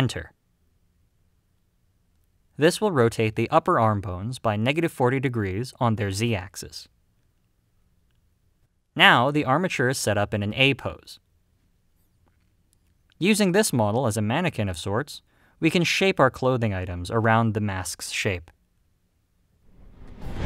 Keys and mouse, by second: 6.4-8.5 middle drag, 11.1 click, 12.8 click.